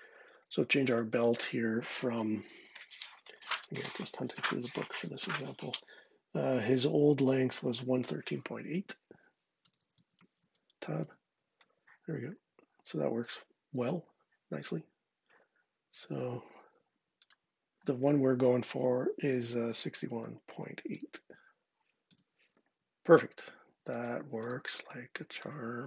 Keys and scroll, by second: 9.1-10.6 typing, 10.8 Tab, 19.3-20.8 typing, 21.9 Tab.